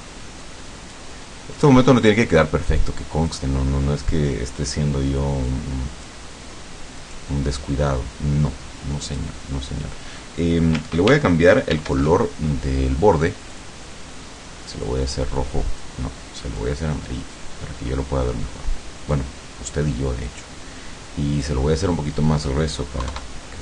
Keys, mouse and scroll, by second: 0.5 click, 1.7 click, 2.7 click, 5.5 click, 7.1 click, 9.1 click, 11.8 ctrl+shift+f, 13.5 click, 14.9-16.1 drag, 16.6-17.6 drag, 19.2-20.5 drag, 21.4 click, 23.1 KP_3.